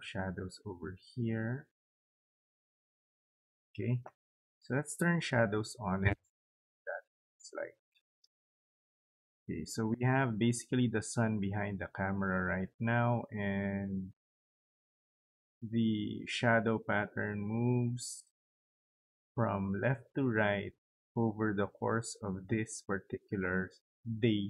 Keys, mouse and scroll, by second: 1.7 click, 2.2 click, 4.8 click, 7.8-24.4 drag.